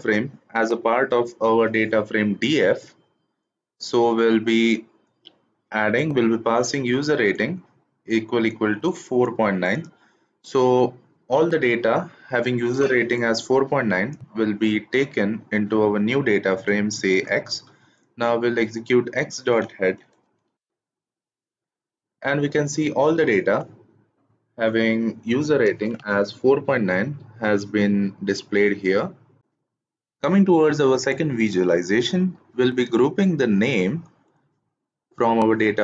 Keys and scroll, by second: 20.1 shift+Return.